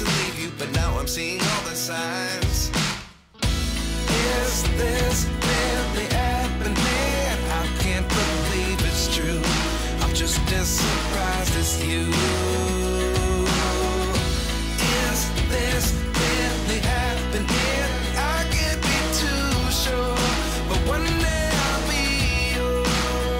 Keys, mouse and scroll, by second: 0.2 click, 1.5-4.5 drag, 5.8 click, 6.5 click, 8.4-9.9 drag, 10.3 scroll down 3, 10.8 shift+a, 15.7 click, 16.5 scroll down 1, 17.7 g, 21.6 click.